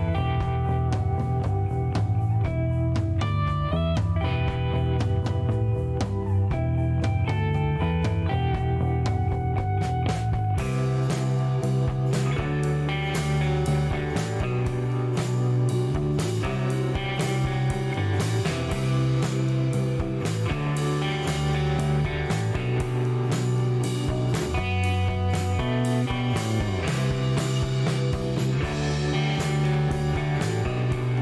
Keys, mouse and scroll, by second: 1.0 click, 3.1 click, 3.8 right click, 4.8 click, 6.4 click, 8.8 click, 9.5 right click, 9.9 click, 11.4-11.9 scroll up 1, 12.2 scroll up 1, 16.4 click, 18.1 click, 19.6 click, 20.9-21.8 typing, 22.8 click, 25.2 click, 27.4 click, 28.9-29.5 scroll up 3, 30.2 scroll up 2.